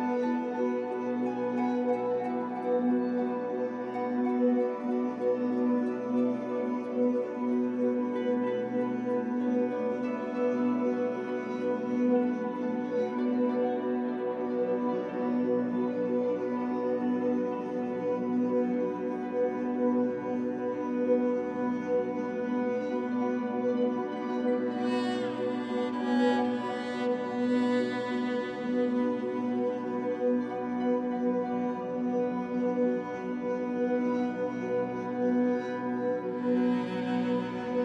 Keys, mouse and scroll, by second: 3.8-7.9 shift+middle drag, 7.9 click, 9.5-23.7 drag, 23.4 scroll down 1, 23.7-25.1 shift+middle drag, 23.9 scroll up 1, 25.1-28.2 drag, 28.2-29.2 shift+middle drag, 29.2-37.8 drag.